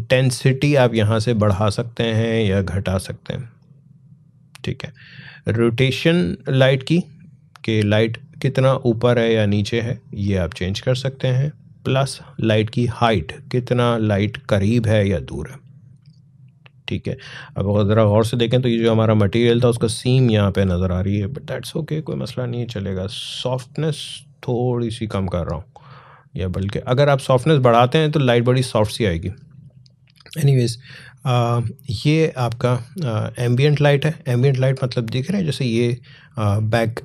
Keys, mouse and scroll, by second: 1.8-22.7 drag, 22.7-37.0 drag.